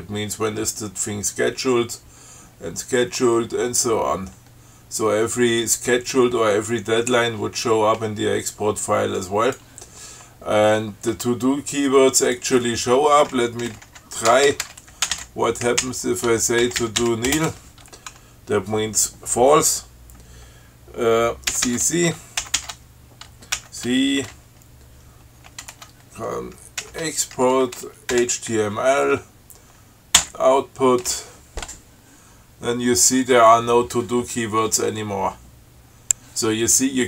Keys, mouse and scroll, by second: 0.7-1.4 scroll down 4, 2.0-3.2 scroll down 6, 3.7-5.0 scroll down 6, 6.4-6.8 scroll down 2, 9.5 click, 12.5 click, 13.7-17.8 typing, 21.8 ctrl+c, 22.7 ctrl+x, 23.8 ctrl+c, 27.1 ctrl+e, 28.4 h, 30.4 o, 35.1-35.8 scroll down 4, 36.1 scroll down 2.